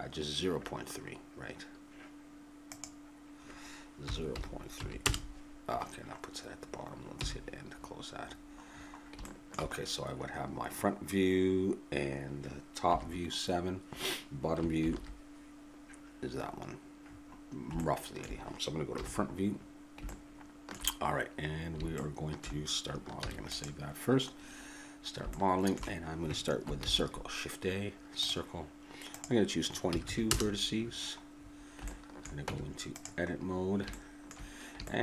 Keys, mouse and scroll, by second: 2.7-4.9 drag, 7.1 n, 7.7 middle click, 8.2-9.3 drag, 9.6-12.9 middle drag, 12.9 KP_7, 14.8 ctrl+KP_7, 18.9 KP_1, 23.2 ctrl+s, 28.3 shift+a, 29.1-31.4 drag, 30.0 2, 32.1 click, 32.4 Tab, 33.4 middle click.